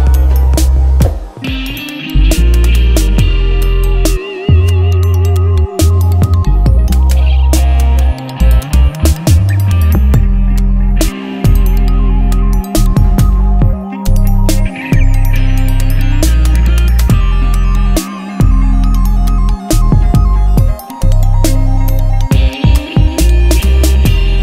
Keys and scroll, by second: 0.0-4.4 typing, 5.8-11.4 typing, 11.8 Return, 15.2 F5, 18.5 Return, 19.4-21.0 typing.